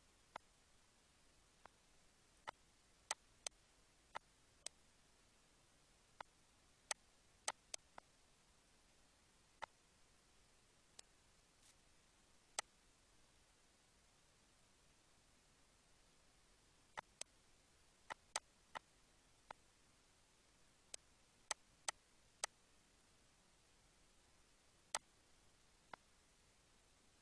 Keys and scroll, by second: 1.2 -, 10.1 -, 11.5 ctrl+s, 15.4 ctrl+d, 26.5 ctrl+z.